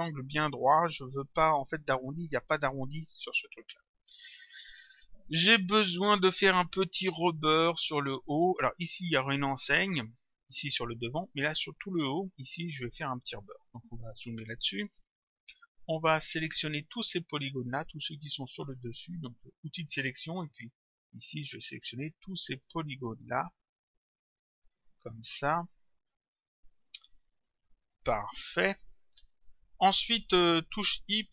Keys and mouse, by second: 18.1 click, 19.9 click.